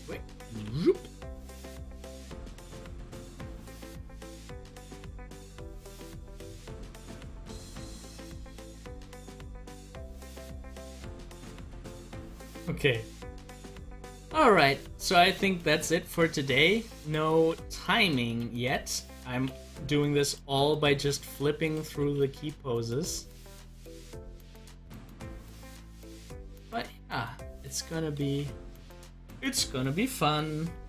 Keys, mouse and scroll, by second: 1.9 click, 3.1 click, 4.2 click, 5.4 click, 6.9 scroll down 2, 9.1 scroll up 1, 9.8 middle click, 10.5 scroll up 1, 13.1 click, 14.3 click, 15.5 click, 17.0 click, 18.7 click, 20.3 click, 21.6 click, 22.9 click, 24.5 click, 25.8 click, 26.1 typing, 27.4 typing, 28.9 click.